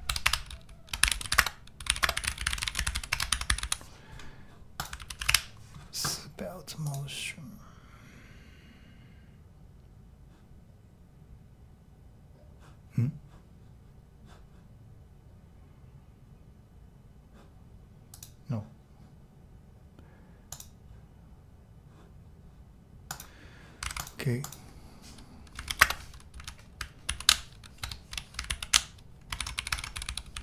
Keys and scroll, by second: 0.0-4.1 typing, 0.2 Return, 5.0 super+t, 5.2 super+v, 5.3 Return, 25.3-26.2 typing, 27.1 alt+v, 27.8 BackSpace, 28.5 alt+super+v, 29.3-30.4 typing.